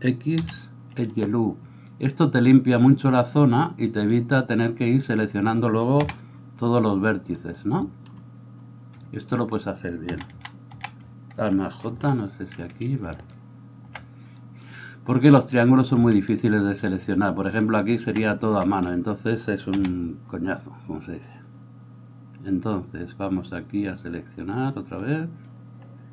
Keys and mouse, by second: 6.0 a, 10.1 a, 10.4 a, 12.0 alt+j, 13.2 alt+middle click, 13.2 alt+right click, 16.9-18.0 alt+shift+right drag, 19.8 a.